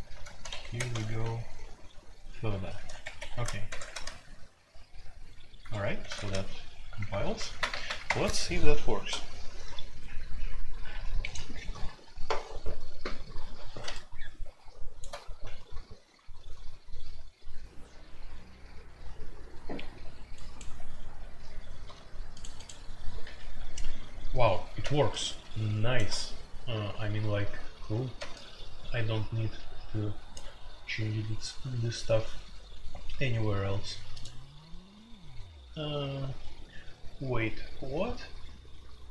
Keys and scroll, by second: 0.0-2.7 typing, 0.2 Tab, 0.7 Tab, 3.0 Escape, 3.1 F2, 3.6 ctrl+c, 3.8 ctrl+c, 6.0 ctrl+c, 6.2 ctrl+c, 7.5 alt+2, 7.8 alt+p, 8.0 Return, 20.6 Insert.